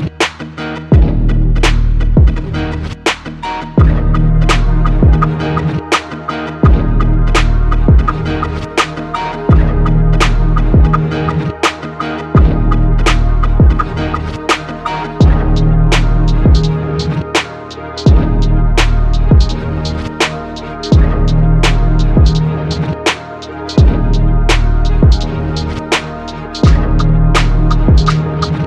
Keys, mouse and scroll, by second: 1.8 Tab, 2.5 shift+a, 5.4 click, 5.6 click, 5.9 click, 6.8-8.5 typing, 9.0 Tab, 12.3 e, 12.5 r.